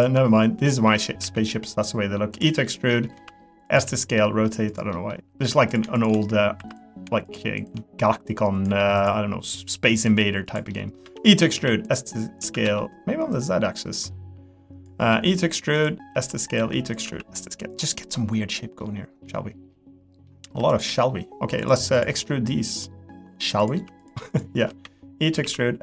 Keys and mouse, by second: 0.7 middle click, 1.2 e, 2.6 middle click, 3.1 s, 3.8 g, 4.9 middle click, 5.3 2, 6.0 shift+click, 6.6 3, 6.7 click, 7.6 shift+click, 8.4 click, 9.5 click, 10.1 3, 10.5 click, 10.7 middle click, 11.0 e, 11.5 s, 14.0 click, 15.1 e, 16.1 s, 16.6 e, 17.0 s, 17.9 middle click, 18.5 middle click, 19.3-20.3 middle drag, 20.4 3, 20.7 click, 21.6 shift+click, 22.2 middle click, 24.0 shift+click, 24.3 shift+click, 24.8 e, 25.4 s.